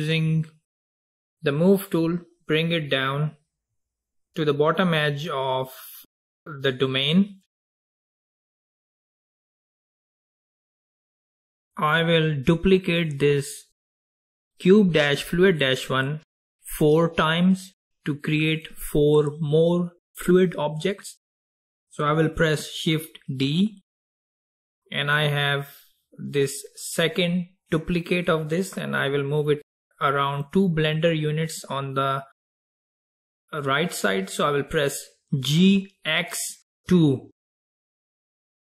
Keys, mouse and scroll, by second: 1.0-2.8 drag, 9.4 drag, 10.7 click, 23.5 shift+d, 37.9 g.